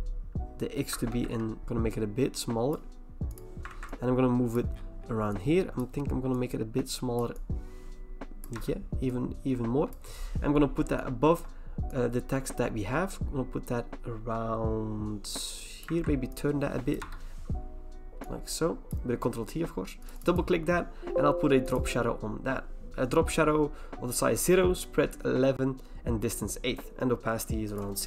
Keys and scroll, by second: 0.9-1.6 typing, 3.7 ctrl+t, 8.5 Return, 15.9 ctrl+t, 17.0 Return.